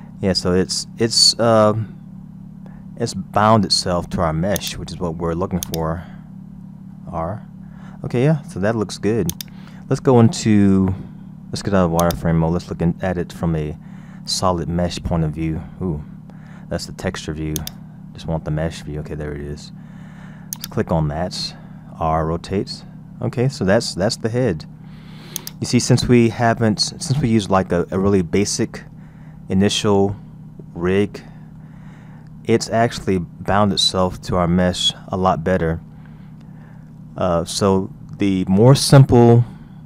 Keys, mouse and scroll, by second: 5.7 click, 6.9 r, 13.1 click, 14.2-14.7 scroll up 1, 14.7-15.0 scroll down 1, 15.3 scroll down 1, 17.6 click, 18.6-18.9 scroll up 1, 19.1-19.4 scroll down 2, 20.5 click, 22.1 r, 26.1-28.1 middle drag, 28.1-28.6 scroll down 2, 28.6-31.7 middle drag, 32.0-32.5 scroll up 3, 34.0-36.4 scroll down 3, 36.4-37.8 scroll up 2.